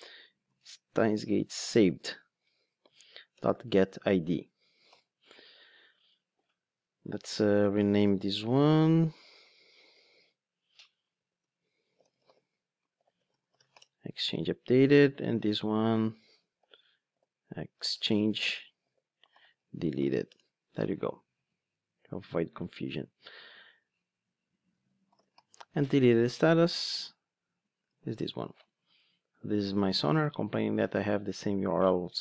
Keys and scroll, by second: 0.4 super+c, 1.8 super+v, 4.8 alt+super+l, 10.6 shift+F6, 16.0 shift+F6, 26.9 super+c, 27.8 super+v.